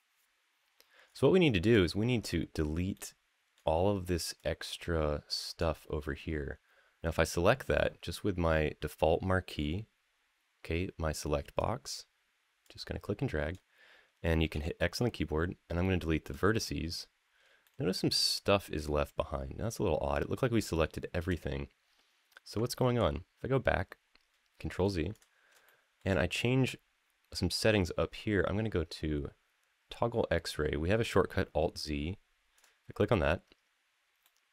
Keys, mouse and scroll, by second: 0.8-1.5 scroll down 4, 1.6 shift+middle click, 2.1 middle click, 2.7 middle click, 4.1-5.4 drag, 9.3-11.4 drag, 12.4 click, 14.3 x, 17.4-18.0 shift+middle drag, 22.7 ctrl+z, 24.9 click, 25.4 shift+middle click, 32.3 click, 34.0-34.5 middle drag.